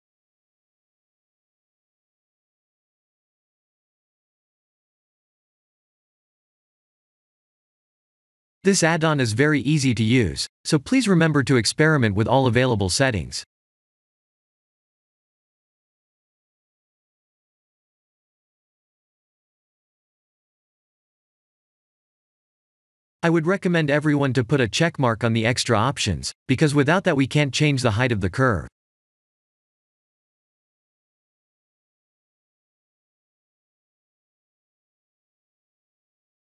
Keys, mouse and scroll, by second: 3.0 shift+a, 9.2 middle click, 16.3 click, 16.9 click, 18.3 click, 19.1 click, 19.7 click, 21.4 middle click, 23.9 click, 27.0 click, 29.7 click, 32.3 click.